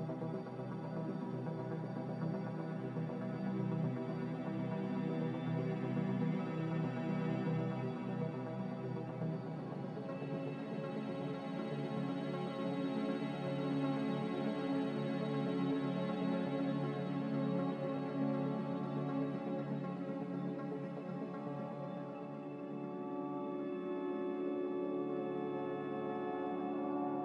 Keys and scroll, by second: 1.1 b, 4.6 b, 6.0-6.4 typing, 7.9 Return, 10.9 Return, 13.0 a, 15.4 ctrl+c, 20.7 m, 26.5 n.